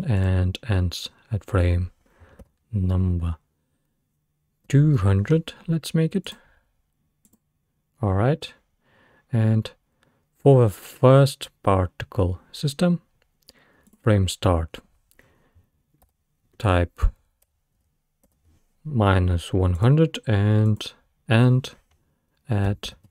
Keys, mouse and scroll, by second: 0.2-3.3 drag, 5.0 0, 13.9-17.0 drag, 20.7-23.1 drag.